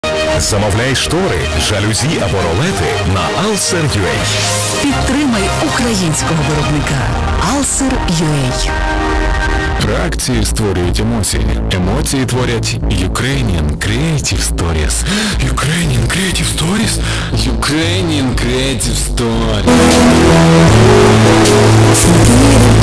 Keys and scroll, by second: 4.5 Up, 4.5-5.2 typing, 4.9 Up, 5.1 Return.